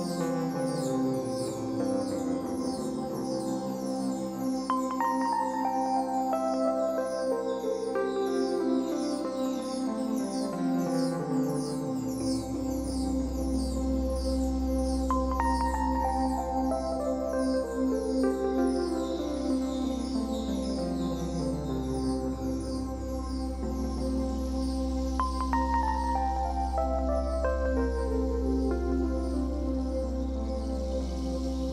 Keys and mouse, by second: 10.1 drag, 12.5-13.4 drag, 14.4-19.3 drag, 23.5 ctrl+s, 25.6-27.8 drag, 28.6-31.7 drag.